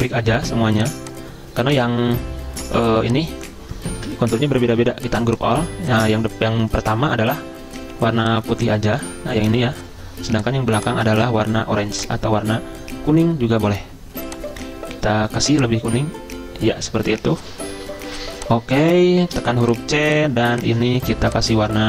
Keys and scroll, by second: 4.1 ctrl+z, 9.1 ctrl+z, 19.4 c.